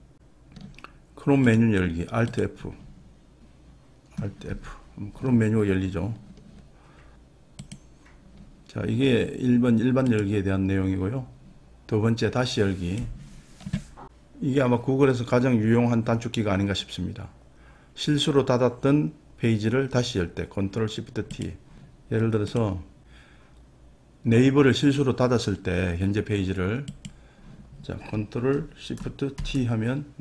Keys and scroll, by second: 29.4 ctrl+shift+t.